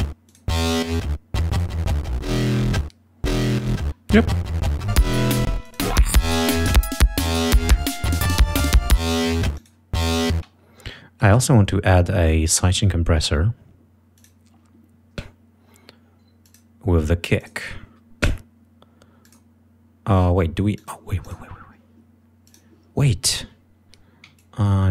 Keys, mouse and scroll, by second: 0.2 click, 1.5 click, 3.5 click, 4.9 click, 5.5 space, 5.6 click, 6.4 click, 9.0 click, 9.5 click, 10.3 space, 11.2 right click, 14.1 click, 16.4 click, 17.3 click, 19.2 click, 20.7 click, 21.2 click, 22.5 click.